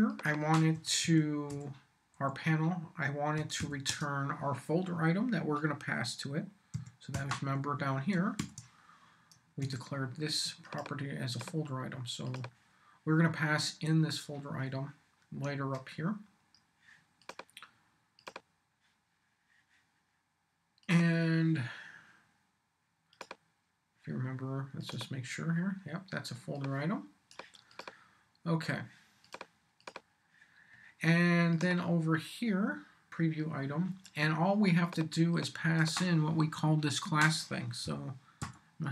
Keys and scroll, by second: 0.5-2.1 typing, 3.3 r, 3.6 n, 3.9 space, 6.7-8.9 typing, 9.3 shift+super+f, 9.6 shift+super+s, 32.5 v, 37.8 m, 38.4 y.